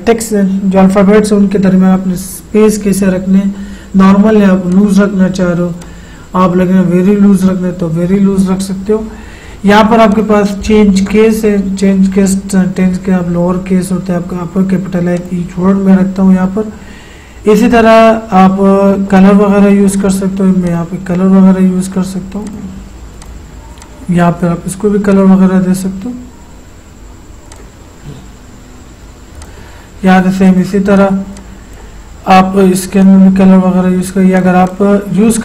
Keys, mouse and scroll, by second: 4.7 click, 10.1 click, 10.2 click, 15.1 click, 19.2-25.2 drag, 27.5-35.4 drag.